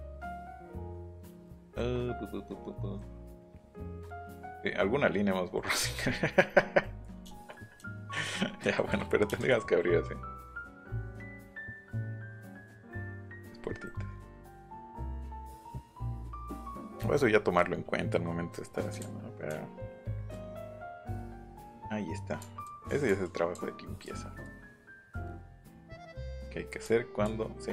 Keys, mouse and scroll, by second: 3.3 middle click, 3.6 middle click, 4.0 middle click, 7.7 shift+middle click, 8.2 middle click, 8.5 middle click, 8.9 Escape, 9.1 middle click, 9.4 Escape, 11.7 click, 19.0 ctrl+z, 19.5 ctrl+z, 20.7 ctrl+z, 20.9 ctrl+z, 21.8 ctrl+z, 22.4 ctrl+z, 22.6 ctrl+z, 22.8 ctrl+z, 23.1 ctrl+z, 23.2 ctrl+z, 23.5 ctrl+z, 24.0 ctrl+z, 24.4 ctrl+z, 24.7 ctrl+z, 24.9 ctrl+z, 25.3 ctrl+z, 25.6 ctrl+z, 26.0 ctrl+z, 26.3 ctrl+z, 26.8 ctrl+z, 27.2 ctrl+z.